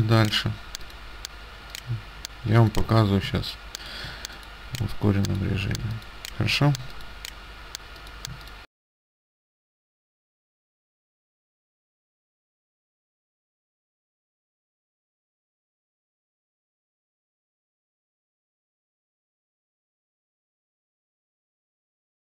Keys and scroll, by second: 10.5 ctrl+z, 11.5 space, 11.8 space, 14.5 space, 18.1 space, 19.3 space, 21.7 space.